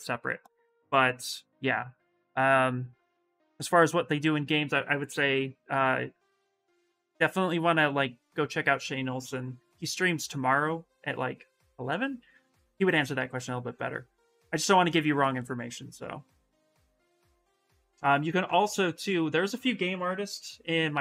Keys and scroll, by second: 20.1 ctrl+c.